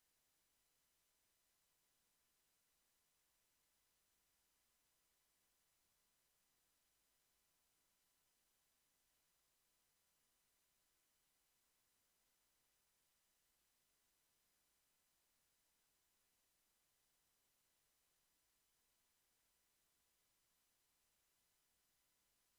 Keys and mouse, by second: 16.3 s, 21.4 s.